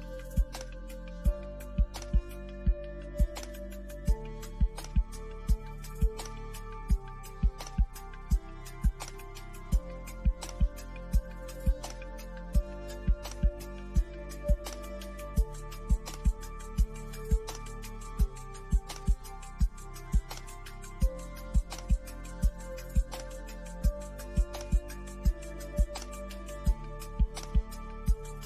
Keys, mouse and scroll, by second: 2.3 click, 18.5 click, 26.8 scroll down 1.